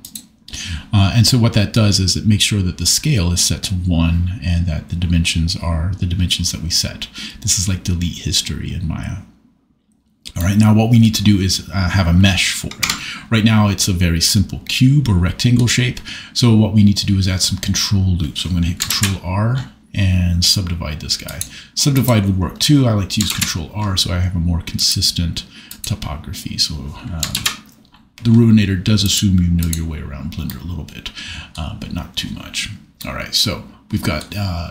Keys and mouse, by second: 12.8 Tab, 18.9 ctrl+r, 21.2 click, 23.4 ctrl+r, 24.7 click, 27.3 ctrl+r, 29.0 click, 29.6 click, 30.4 middle click.